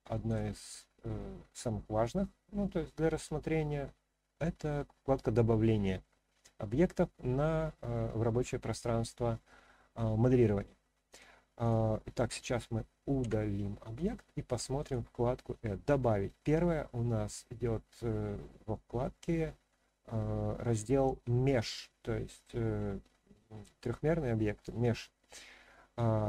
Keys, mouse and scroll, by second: 0.2 click, 11.1 click, 11.6 click, 13.2 Delete, 13.9 click, 14.8-26.2 drag.